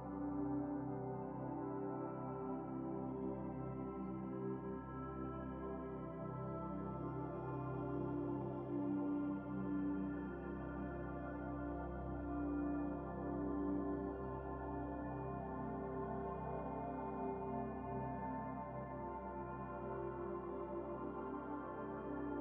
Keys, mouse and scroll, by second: 2.8 shift+a, 7.0 click, 8.4 click, 11.3-11.7 scroll up 5, 11.9 middle click, 12.3-13.0 scroll up 7, 13.2-13.6 scroll down 8, 14.4 KP_Decimal, 15.4 scroll up 3, 15.9-17.7 drag, 20.1 KP_0.